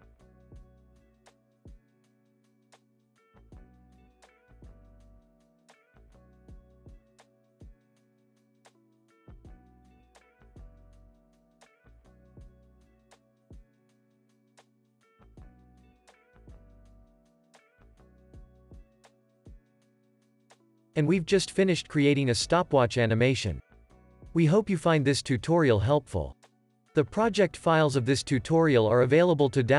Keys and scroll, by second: 7.8 F9, 10.2 alt+q, 10.5 space, 17.2 super+v, 17.9 super+s, 18.5 space.